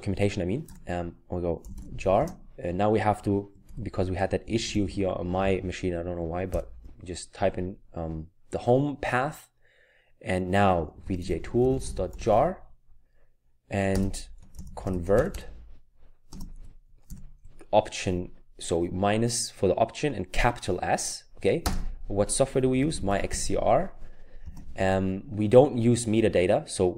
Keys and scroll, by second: 0.7-1.7 typing, 3.6-5.4 typing, 6.5 typing, 10.6-12.7 typing, 14.3-15.8 typing, 17.0 typing, 20.4 typing, 22.4-23.8 typing.